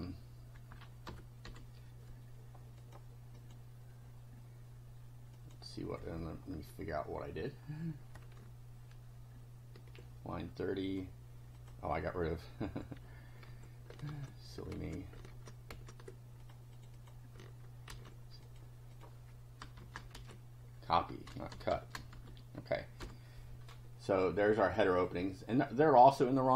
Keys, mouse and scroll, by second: 0.7 End, 1.1 ;, 1.4 F5, 2.8 click, 3.4 click, 5.4 click, 7.6 scroll down 2, 10.8 click, 11.6 click, 13.5 ctrl+z, 16.4 ctrl+click, 16.7 ctrl+click, 17.9 ctrl+c, 18.4 ctrl+click, 18.9 ctrl+click, 19.8 Return, 20.1 ctrl+v, 21.3-22.7 typing, 23.0 F5, 24.2 click, 25.1-26.4 drag.